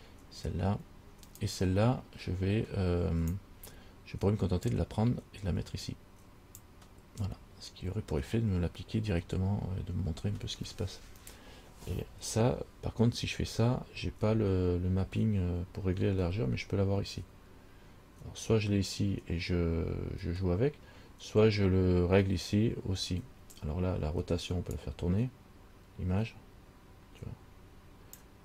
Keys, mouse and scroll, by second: 1.6 click, 1.7 click, 4.9 click, 24.9 click.